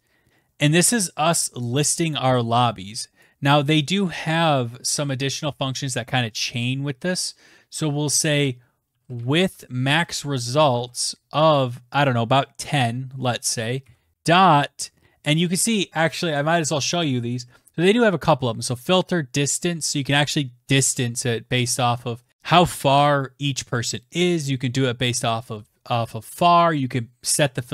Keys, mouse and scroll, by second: 0.9 click, 2.0 click, 2.7 BackSpace, 6.3-7.6 typing, 8.8-9.5 typing, 10.8 Right, 11.5 Right, 12.6-15.5 typing, 15.0 scroll, 26.7-27.1 scroll.